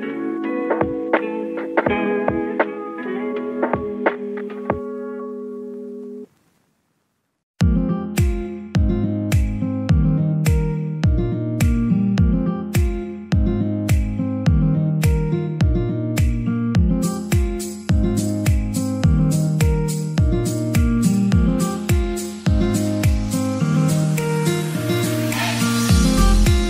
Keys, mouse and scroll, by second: 1.0 click, 1.5 middle click, 2.2 r, 2.8 KP_0, 3.0 Return, 3.5 g, 4.6 click, 4.8 g, 6.6 click, 6.9-7.2 scroll up 4, 7.2-8.3 middle drag, 8.3 KP_1, 9.9 r, 13.8 Return, 14.8 s, 15.3 click, 15.5-17.4 middle drag, 17.4 shift+g, 17.7 z, 18.2 click, 18.5-20.9 middle drag, 20.9 s, 21.5-23.6 middle drag, 23.6 g, 24.3 click, 24.6 middle click, 25.2 Tab, 25.8 middle click, 26.4 1.